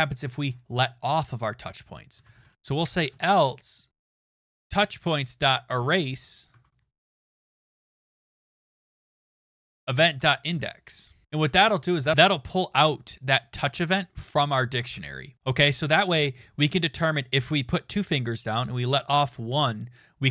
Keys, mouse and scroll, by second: 1.9-5.7 typing, 4.5 Tab, 6.5 Tab, 7.0-10.6 typing, 14.8 BackSpace.